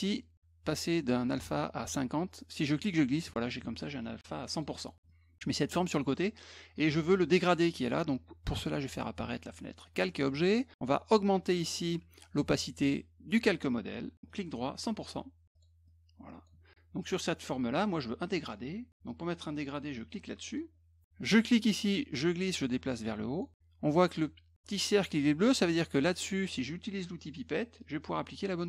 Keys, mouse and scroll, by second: 2.3-3.3 drag, 4.5 click, 5.1 click, 5.8 middle click, 8.7 click, 14.3 right click, 14.8 click, 15.5 click, 15.9 click, 20.5 click, 21.3-23.4 drag, 27.8 click.